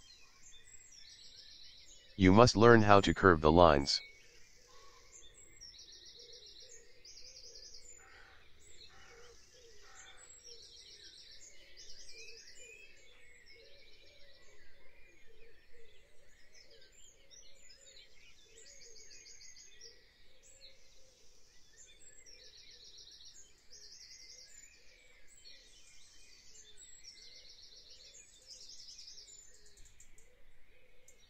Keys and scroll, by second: 0.6 p, 25.2 v, 26.4 p, 30.8 v.